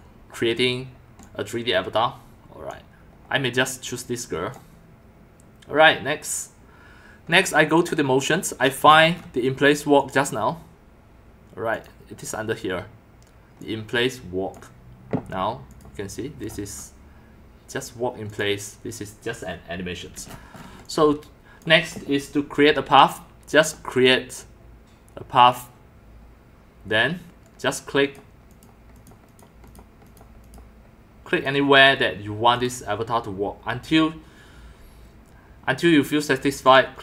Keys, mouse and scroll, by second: 1.2-2.7 drag, 3.6 click, 7.8 click, 10.0 click, 11.7 click, 13.6 click, 15.7 click, 18.3 click, 20.5-22.2 typing, 20.5 middle click, 20.8-21.6 drag, 22.8 click, 23.6 click, 23.9 click, 25.4 click, 28.0 click, 28.5 click, 29.0 click, 29.3 click, 29.7 click, 30.0 click, 30.4 click, 31.3 click, 32.5 click, 36.6 click.